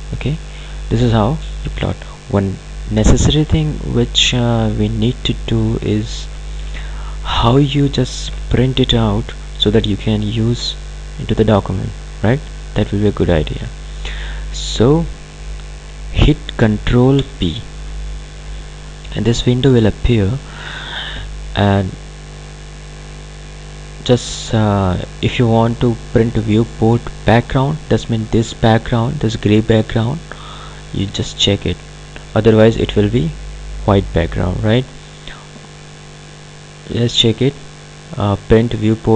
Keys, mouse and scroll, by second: 0.1-2.0 scroll down 1, 2.9 ctrl+alt+Num_Lock, 2.9 scroll down 1, 3.1-9.3 ctrl+alt+drag, 14.9 click, 17.1 ctrl+p, 19.1-22.3 drag, 31.0 click, 36.1 click.